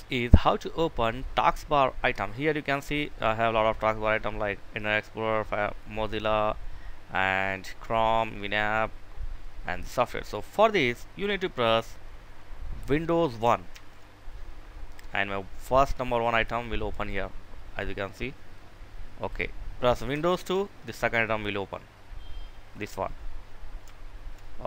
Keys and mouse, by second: 13.3 super+1, 13.8 super+1, 15.8 super+1, 16.3 super+1, 18.8 click, 20.1 super+2, 24.3 click.